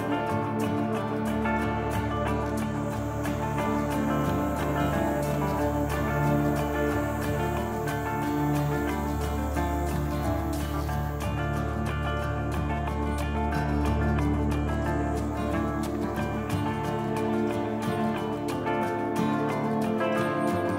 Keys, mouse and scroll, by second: 4.5 scroll down 1, 4.7 middle click, 6.0 shift+middle click, 6.5 middle click, 10.1 click, 13.6 click.